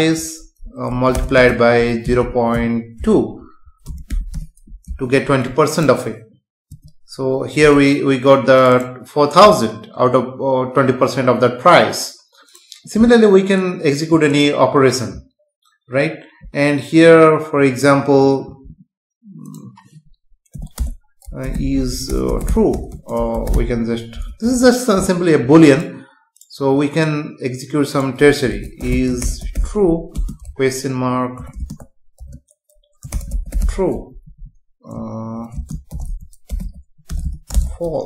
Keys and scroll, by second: 3.9 BackSpace, 4.9 ctrl+s, 6.7 F5, 20.8 Return, 22.9 space, 24.4 ctrl+s, 30.1 space, 34.1 Right, 35.5 space, 37.1 BackSpace.